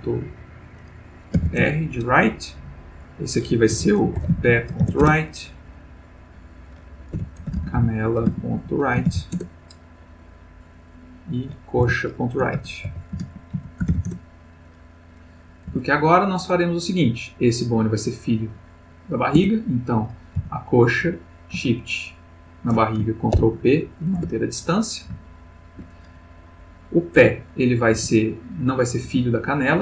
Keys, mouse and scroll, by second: 1.4 shift+r, 1.6 shift+Return, 2.9 click, 3.8 F2, 4.2 shift+p, 4.3 shift+e, 4.5 shift+., 4.8 shift+r, 5.0 shift+Return, 6.2 click, 7.2 F2, 7.4-9.1 typing, 9.3 shift+Return, 10.8 click, 11.8 F2, 12.5-13.9 typing, 14.1 shift+Return, 15.7 Tab, 19.4 Tab, 19.8 click, 20.4 g, 21.2 Escape, 22.1 shift+click, 23.3 ctrl+p, 24.2 Return, 25.2 shift+middle click, 26.4 click, 27.2 Tab, 27.9 g, 29.1 Escape.